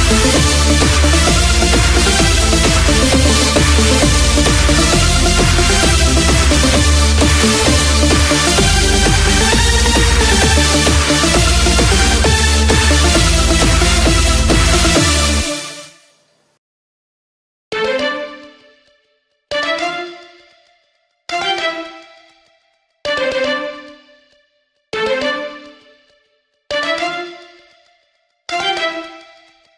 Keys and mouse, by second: 0.9-4.3 drag, 20.0-25.3 drag.